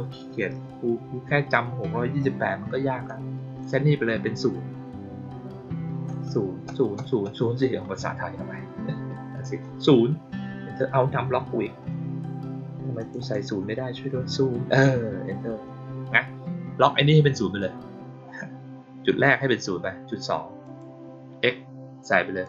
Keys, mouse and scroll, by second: 3.0-3.5 drag, 12.9 click, 13.1 click, 20.6 click, 22.4 click.